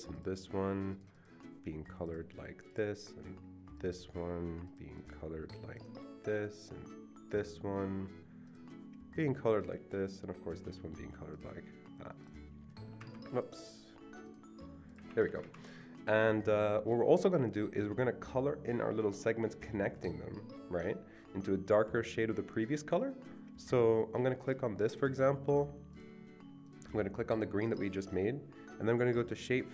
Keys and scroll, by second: 13.1 Escape, 15.1 Escape, 15.3 Escape, 15.4 Escape.